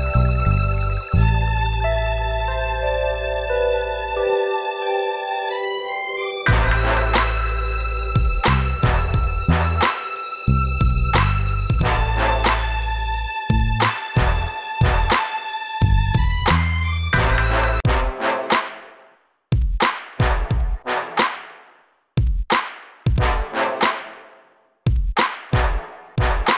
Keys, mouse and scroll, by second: 1.3 scroll down 2, 3.4 scroll up 2, 4.0 click, 4.1 scroll up 1, 4.2 click, 5.0 scroll down 2, 6.0 click, 6.9 click, 7.5 scroll down 2, 8.3 middle click, 9.1 scroll up 2, 10.2 click, 11.1 right click, 11.8 click, 12.7 click, 13.5 click, 14.5 click, 16.0 click, 16.1 click, 16.6 click, 17.4 click, 17.7 scroll down 2, 19.5 click, 20.1 scroll down 2, 20.7 click, 23.0 middle click, 24.3 click.